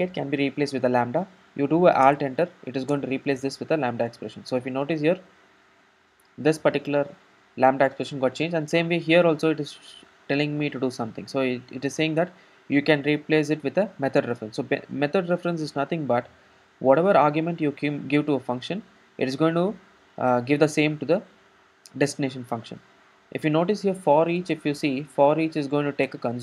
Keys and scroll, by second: 2.1 alt+Return, 26.2 Return.